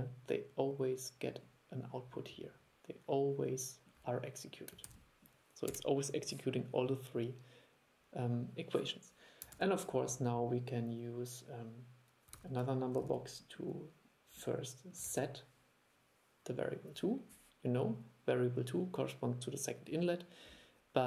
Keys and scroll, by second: 5.0 super+e, 9.6 super+3, 12.5 super+e, 13.1 super+e, 15.2 super+e.